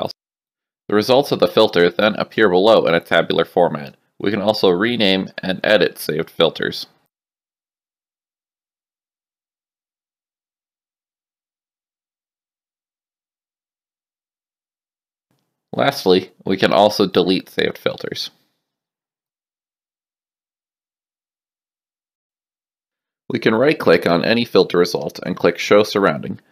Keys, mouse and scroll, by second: 0.6 click, 2.3 click, 3.6 click, 4.9-6.4 typing, 7.8 click, 8.5-10.0 typing, 11.0 click, 12.2 click, 15.0 click, 17.2 click, 18.2 click, 19.4 click, 22.2 alt+F9, 25.1 right click, 26.0 click.